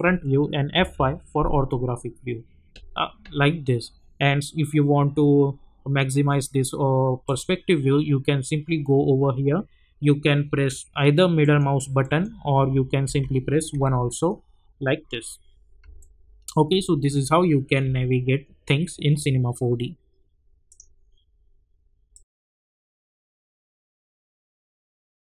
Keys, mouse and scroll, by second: 0.7 F5, 7.2 click, 11.4 middle click, 13.0-13.7 typing, 14.0 middle click, 16.0-17.8 alt+middle drag.